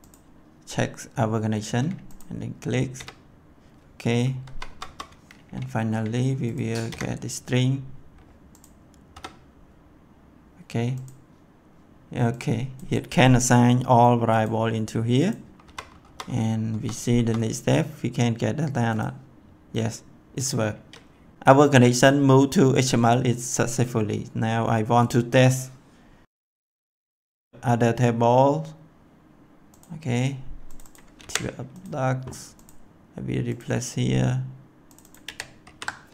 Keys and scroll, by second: 2.9 F5, 4.4 F10, 6.8 F5, 9.0 F10, 15.6 F10, 31.1 ctrl+c, 31.8 ctrl+c, 35.2 ctrl+v, 35.6 ctrl+s.